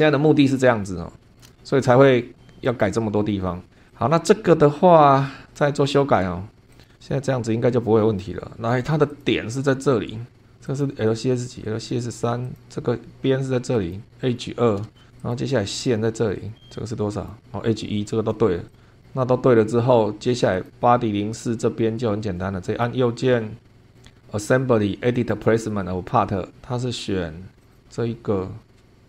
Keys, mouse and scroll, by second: 0.8 super+middle click, 1.4 shift+middle click, 2.7 click, 3.4 scroll down 1, 3.9 click, 5.4 right click, 6.8 click, 7.0-7.5 scroll up 2, 7.7 click, 9.1 click, 10.6 click, 12.4 click, 13.7 click, 14.3-14.6 scroll down 2, 14.8 shift+middle click, 15.2 click, 17.1 click, 18.6 click, 19.0-19.3 scroll down 2, 20.5 click, 22.6 right click, 25.3 click, 27.6 click.